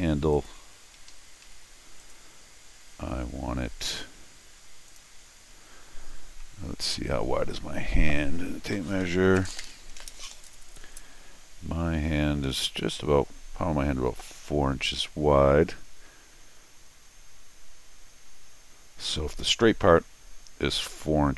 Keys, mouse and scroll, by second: 0.3 click, 1.1 Escape, 1.5 d, 2.0 click, 4.9 click.